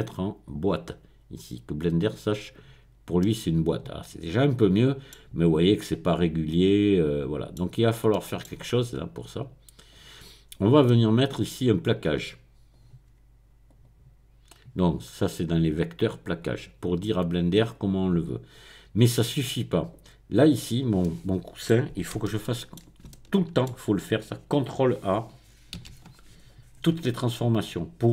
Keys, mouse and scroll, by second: 0.5 click, 2.0 click, 3.2-5.6 middle drag, 7.6-8.1 scroll down 1, 9.9 click, 10.9-11.5 scroll down 1, 12.1 click, 13.7 click, 16.4 click, 17.7 click, 19.3-20.3 drag, 20.3 click, 21.0 middle click, 21.7-22.3 scroll up 1, 22.3-23.7 shift+middle drag, 25.8 ctrl+a, 27.4 click.